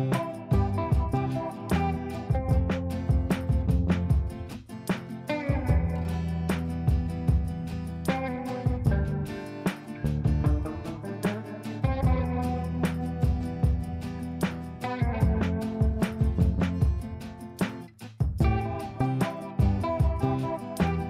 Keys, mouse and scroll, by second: 0.1 l, 1.1-5.8 drag, 6.2 F3, 6.9 F2, 7.2-9.2 drag, 13.3 click, 15.4 click, 15.9 F3, 16.6 click, 17.7 ctrl+space, 17.9-21.0 drag.